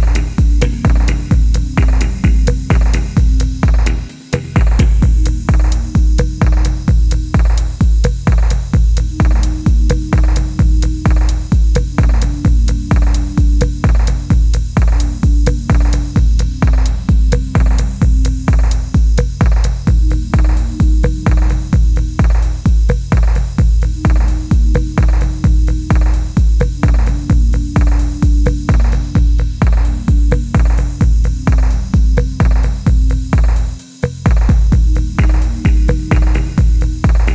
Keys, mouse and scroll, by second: 1.4 middle click, 8.1-9.7 scroll down 1, 9.7 F1, 10.0 middle click, 12.0 ctrl+z, 12.3 ctrl+middle click, 13.0-14.3 scroll up 1, 14.3 double click, 16.8 F1, 17.1 middle click, 17.5 scroll down 1, 17.9 shift+middle click, 21.2 shift+middle click, 22.7 F2, 23.0-23.8 scroll up 1, 23.6-24.4 typing, 24.7-25.0 scroll up 1, 27.6 double click, 29.8 scroll up 1, 30.1-31.6 scroll down 1, 31.8 typing, 33.2 typing.